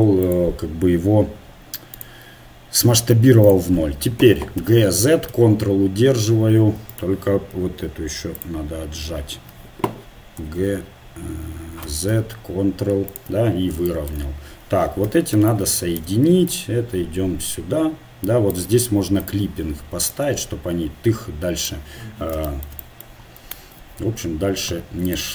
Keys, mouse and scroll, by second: 0.3-3.9 drag, 4.6 g, 8.4-10.4 drag, 10.4 g, 13.6-15.3 middle drag, 15.0 a, 15.5 click, 15.5 middle click, 15.5 right click, 16.3-18.2 drag, 19.2 click, 20.1-21.8 right drag, 23.6 ctrl+Tab.